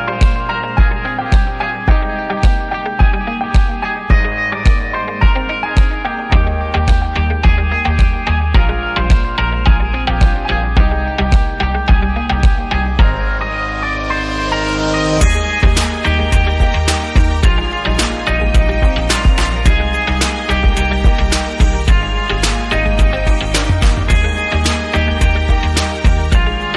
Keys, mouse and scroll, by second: 0.0 click, 0.4 right click, 0.5 double right click, 1.5 click, 2.1 click, 2.3 double click, 2.4 right click, 3.1 double click, 4.3 click, 5.7 click, 5.9 click, 6.5 ctrl+a, 7.6 click, 8.3 click, 9.3 click, 10.4-13.4 typing, 14.1 click, 15.4 click, 16.4 click, 16.6 click, 16.7 double click, 16.8 click, 17.2 double click, 18.4 double click, 20.3 click, 20.5 click, 22.1 click, 23.0 click, 23.1 click, 23.7 click.